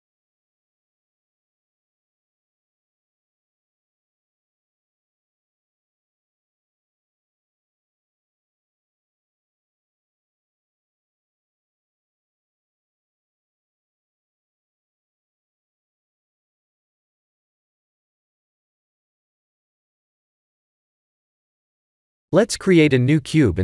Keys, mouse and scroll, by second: 1.0 click, 1.2 middle click, 5.1 middle click, 6.7 middle click, 10.0 middle click, 12.7 click, 13.4 click, 14.0 middle click, 16.3 KP_1, 17.7 click, 17.9 shift+a, 21.1 ctrl+z, 21.8 Tab, 22.4 click, 22.6 shift+a.